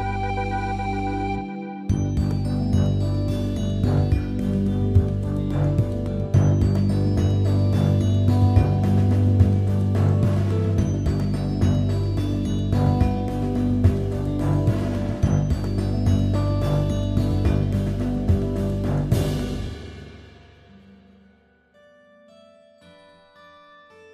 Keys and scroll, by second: 4.6 Return, 8.8 b, 9.8 ], 12.8 x.